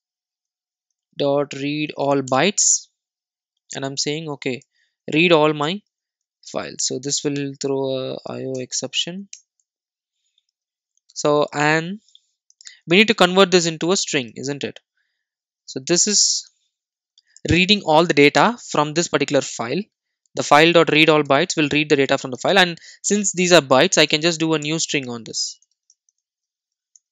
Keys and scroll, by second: 2.4 Return, 8.6 alt+Return, 13.5 Return, 16.4 Return, 19.7 alt+super+l.